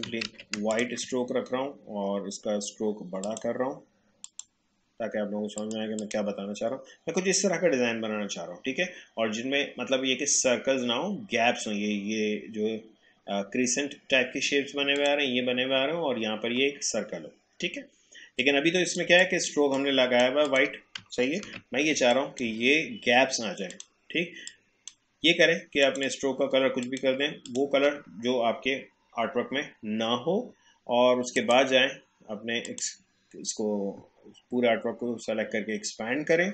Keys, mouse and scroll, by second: 0.3 ctrl+z, 0.7 shift+click, 14.9 click, 18.4 click, 19.1 space, 19.2 click, 21.4 ctrl+z, 21.9 space, 22.1 click, 22.5 space, 23.7-25.8 drag, 31.4 click.